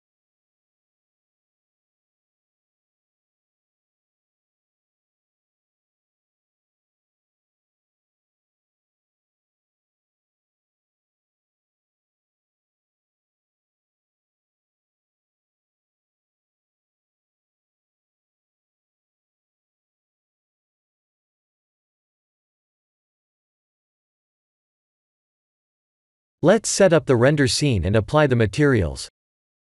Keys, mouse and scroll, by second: 1.7 shift+click, 2.6 ctrl+j, 3.3 click, 4.9 click, 5.6 click, 8.6 click, 9.1 click, 11.2 click, 12.0 click, 12.2 x, 12.9 middle click, 13.5 middle click, 13.6 shift+z, 14.2 middle click, 18.8 middle click, 20.4-21.9 scroll down 3, 22.1 middle click, 23.8 click, 24.1 right click, 25.2 middle click.